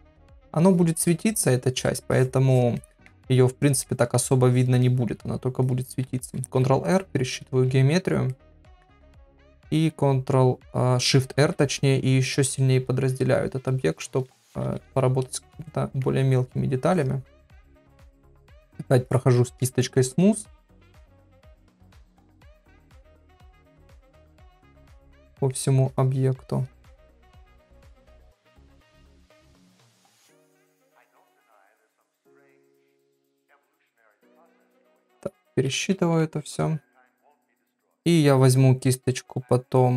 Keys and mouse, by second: 0.6 click, 1.1 middle click, 1.7 click, 2.1 click, 2.5 click, 2.8 middle click, 3.6 click, 3.9 middle click, 4.5 click, 4.8 middle click, 5.6 click, 6.6 ctrl+r, 8.3 middle click, 11.4 shift+r, 14.9 ctrl+r, 15.7 middle click, 16.9 click, 17.3 click, 17.7 middle click, 18.2 click, 18.7 click, 19.1 click, 19.4 middle click, 20.0 click, 20.4 click, 20.8 middle click, 21.4 click, 21.7 middle click, 22.3 click, 22.6 click, 23.3 click, 23.7 click, 24.0 middle click, 24.7 click, 25.0 click, 25.3 middle click, 25.9 click, 26.5 click, 27.0 middle click, 27.5 click, 27.9 click, 28.3 middle click, 28.9 click, 29.2 click, 29.5 click, 29.9 middle click, 30.5 click, 30.9 click, 31.4 click, 31.7 middle click, 32.4 click, 33.2 middle click, 33.7 click, 34.1 click, 35.7 ctrl+r, 37.0 middle click.